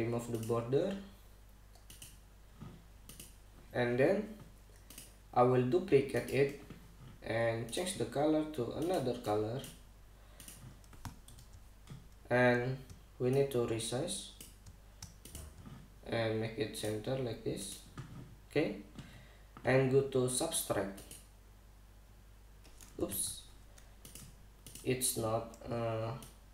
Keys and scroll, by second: 11.9 super+=, 23.7 super+z.